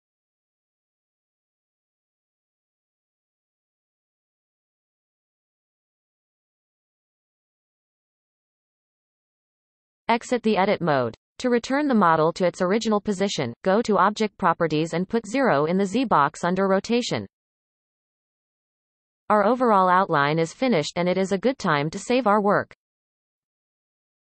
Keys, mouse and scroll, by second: 1.2 scroll down 1, 2.1-2.8 scroll down 3, 2.1 shift+click, 3.1-3.8 scroll down 2, 4.0 scroll down 3, 4.7 shift+click, 5.3 x, 7.2-9.2 scroll down 6, 10.5 Tab, 11.6-14.7 shift+middle drag, 15.3-18.5 drag.